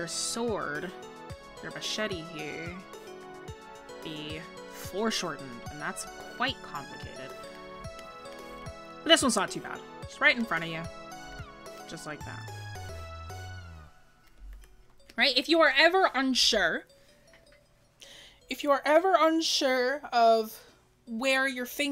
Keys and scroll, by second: 14.7-15.0 scroll down 1.